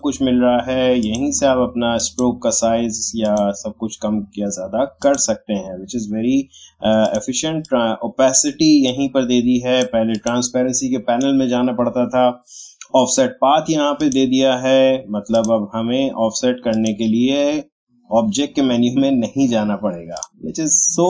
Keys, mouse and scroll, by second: 14.0 click, 17.2-18.3 scroll up 1, 20.1-21.0 drag.